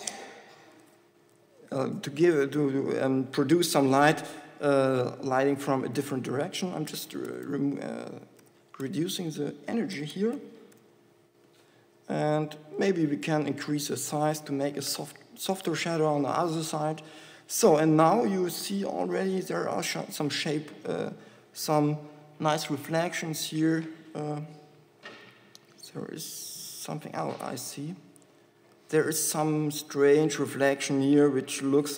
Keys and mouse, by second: 17.3-20.9 middle drag.